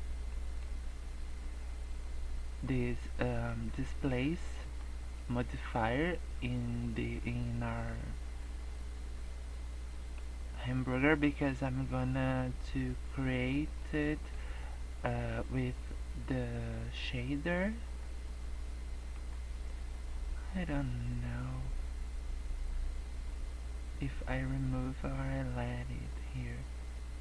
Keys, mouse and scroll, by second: 0.3 middle click, 3.1 middle click, 4.5 middle click, 5.1 middle click, 7.9 middle click, 10.6 middle click, 11.8 middle click, 13.9 middle click, 15.2 middle click, 16.9 middle click, 17.8 scroll up 1, 18.3 scroll down 2, 18.5 middle click, 19.2 scroll up 1, 19.5 middle click.